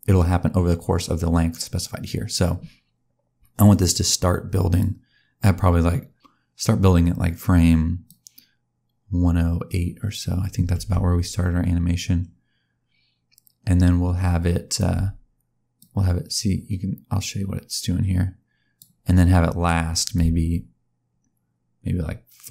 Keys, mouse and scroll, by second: 3.7 click, 8.0 click, 15.7 click, 20.1 click.